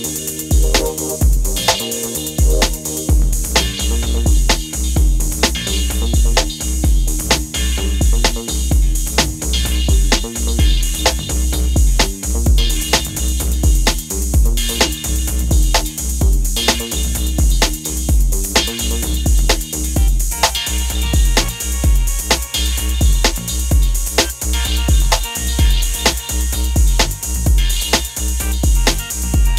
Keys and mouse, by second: 0.9 middle click, 2.3 middle click, 3.2-4.8 middle drag, 5.2-6.7 drag, 8.6-9.9 drag, 8.6-9.9 middle drag, 17.0-21.5 drag, 27.2-29.0 drag.